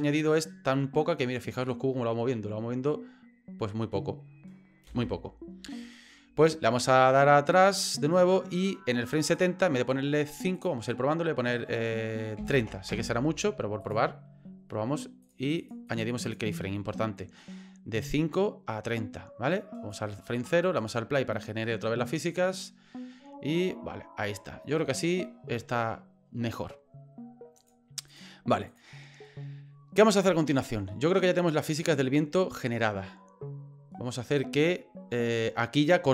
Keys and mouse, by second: 4.9 space, 9.2 click, 10.6-13.7 drag, 13.9-15.7 drag, 15.9 click, 16.2 click, 17.2-19.9 drag, 20.9 click, 27.6 click, 28.1 click, 30.1-36.1 drag.